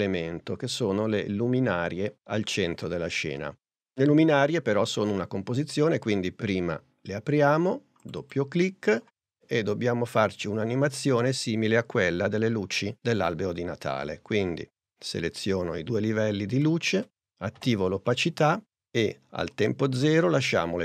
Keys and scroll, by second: 17.6 shift+t.